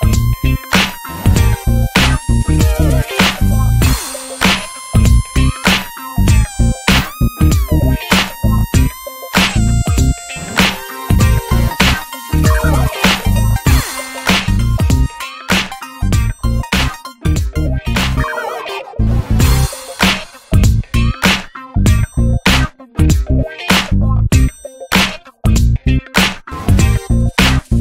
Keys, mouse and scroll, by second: 0.2 click, 1.2 alt+z, 1.4 middle click, 1.5-2.5 scroll up 4, 1.6 Tab, 2.0-2.3 shift+middle drag, 6.7 alt+middle click, 6.9 alt+z, 7.4 shift+middle click, 8.0-8.4 drag, 9.7 r, 10.9 click, 12.8 click, 17.0 KP_0, 17.9 click, 18.4 alt+middle click, 18.6 alt+middle click, 19.2 click, 20.3 click, 21.9-22.4 drag, 22.4 alt+middle click, 22.9 s, 24.5-25.1 shift+middle drag, 25.1 click, 25.5 r, 26.8 click, 27.1 shift+d.